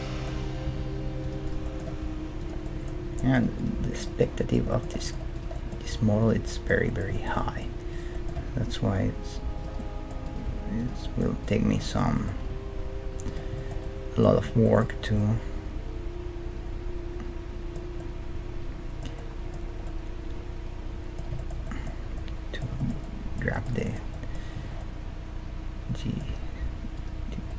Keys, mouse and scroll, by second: 0.7 g, 1.5 right click, 1.9 g, 5.9 g, 7.1 right click, 7.2 middle click, 7.9-9.7 right drag, 8.4 g, 9.7 middle click, 10.2-13.2 right drag, 10.5 g, 10.8-17.2 middle drag, 12.4 g, 15.0 Tab, 18.0-26.1 middle drag, 26.3 Tab, 26.9-27.5 right drag.